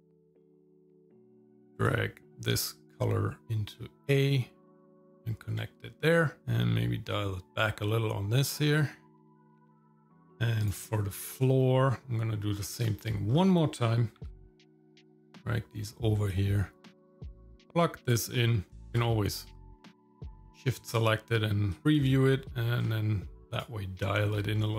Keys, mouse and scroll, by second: 0.0 click, 0.2 click, 0.5 click, 0.8 click, 1.0-1.5 scroll up 2, 1.9-3.4 drag, 4.7 click, 6.4-10.3 drag, 10.6 click, 10.6 middle click, 11.6-12.1 scroll down 2, 12.5-12.8 scroll down 2, 12.9 middle click, 13.4 scroll up 2, 14.4 ctrl+v, 14.6 click, 15.2 click, 16.3 click, 17.0 scroll up 4, 17.1 click, 17.5 click, 18.7 ctrl+shift+click, 19.7 shift+middle click, 19.9 scroll up 2, 20.0 middle click, 20.2 scroll down 2, 21.7-23.6 drag, 24.6 middle click.